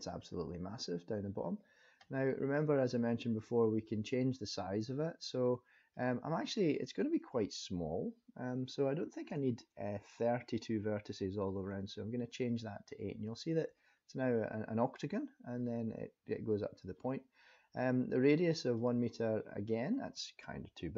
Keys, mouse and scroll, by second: 0.0-1.2 scroll down 4, 1.2-2.1 scroll up 1, 3.3 click, 5.9 click, 18.8 click.